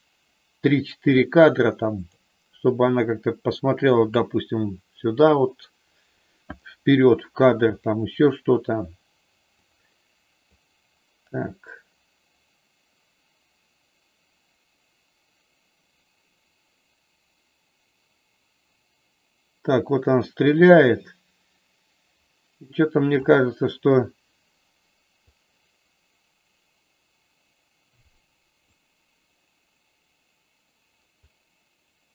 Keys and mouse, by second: 9.5 click, 10.5-23.3 drag, 25.4-28.6 drag, 31.3-32.1 drag.